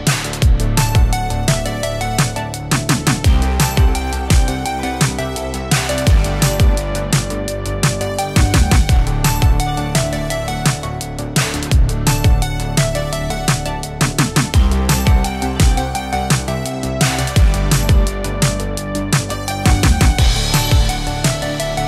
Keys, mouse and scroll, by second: 2.0 shift+click, 4.0 click, 7.5 right click, 9.2 click, 21.4-21.8 click.